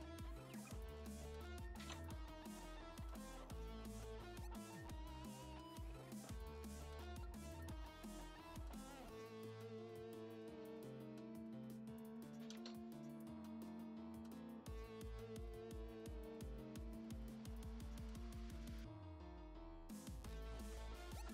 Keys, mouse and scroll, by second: 4.6-5.0 scroll up 4, 6.7 click, 9.0-9.7 scroll down 4, 9.7 click, 12.4 click, 14.1-14.7 scroll up 10, 15.2 middle click, 16.8 scroll down 5, 17.4 middle click, 19.3 click.